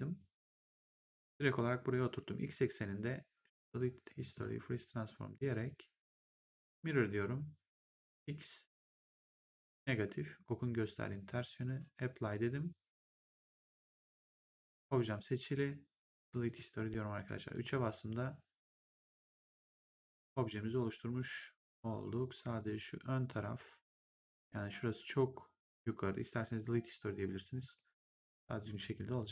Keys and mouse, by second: 3.6 click, 6.6 click, 8.0 click, 11.4 click, 13.6 click, 14.4 right click, 16.4 click, 17.4 3, 18.5 3, 19.0 click, 19.7 ctrl+1, 22.5 click, 23.2 right click, 26.5 click, 27.5 right click, 28.5 click.